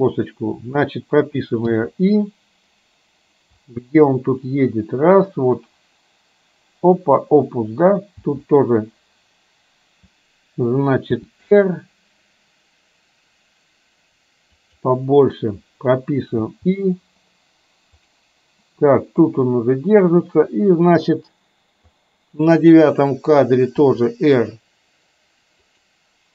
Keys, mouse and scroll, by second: 1.8 i, 3.8-7.3 drag, 8.3 i, 11.3 r, 16.5 i, 18.2 click, 19.4-22.0 drag, 23.9 r.